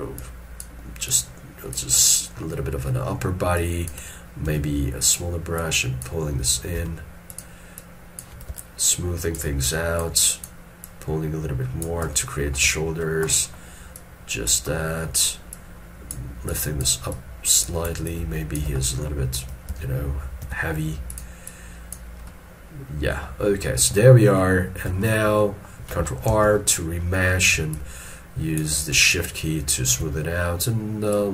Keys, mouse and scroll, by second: 5.7 double click, 6.9 f, 7.9 double click, 10.3 double click, 12.2 middle click, 13.4 middle click, 18.2 shift+click, 18.9 middle click, 19.8 s, 21.6 double click, 23.8-24.1 scroll down 1, 25.1 shift+middle click, 25.5 shift+middle click, 26.4 ctrl+r, 27.3 middle click, 27.8 shift+click, 29.2 shift+click.